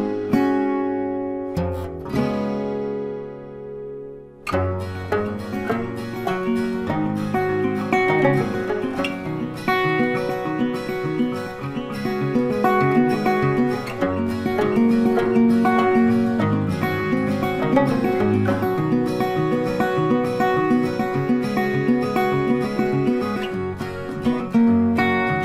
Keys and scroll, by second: 14.9 ctrl+shift+e, 23.0 ctrl+t.